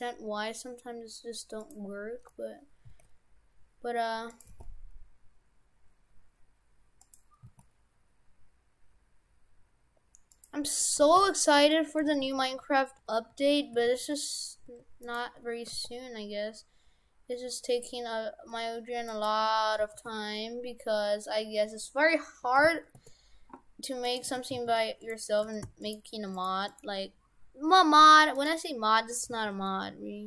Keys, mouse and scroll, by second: 2.2 g, 2.9 s, 4.5 g, 7.5 s, 10.8 right click, 11.0 shift+f, 11.8 Tab, 12.1 shift+f, 14.7 Tab, 15.0 right click, 15.7 r, 19.8 r, 24.0 right click, 24.3 shift+f, 25.5 shift+f, 26.4 right click, 26.7 right click, 28.4 right click, 29.2 g.